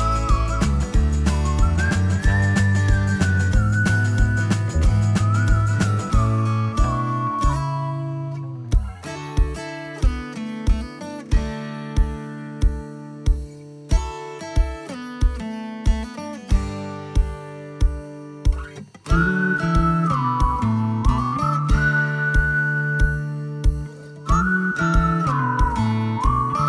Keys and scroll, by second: 4.1 Delete, 8.7-11.7 typing, 15.7-16.7 typing, 19.7-20.5 typing, 23.8-24.8 typing.